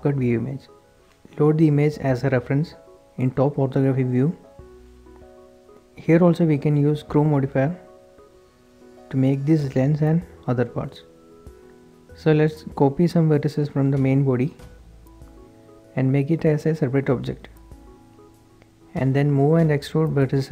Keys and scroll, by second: 3.5 shift+s, 5.5-7.1 typing, 7.8 Tab, 11.2 d, 15.1 Escape, 16.4 p, 18.0 Tab, 19.9 h.